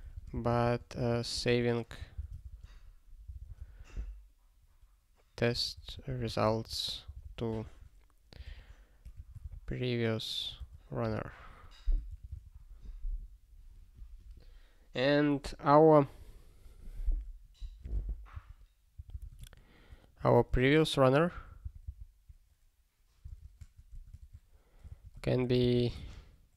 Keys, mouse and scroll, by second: 0.0-3.8 typing, 6.2 u, 6.8 space, 7.0 t, 7.2 space, 8.3-10.0 typing, 10.6 Return, 11.0 ctrl+s, 12.4 ctrl+s, 16.2 click, 17.6 ctrl+a, 17.8 ctrl+space, 17.9 ctrl+n, 18.3 ctrl+w, 18.9 ctrl+n, 19.1 Return, 19.2 ctrl+p, 19.3 Tab, 20.5 ctrl+y, 21.6 alt+b, 23.2 alt+space, 23.9 Tab, 24.2 (, 24.8 alt+s, 25.2 ctrl+e, 25.8-26.5 typing.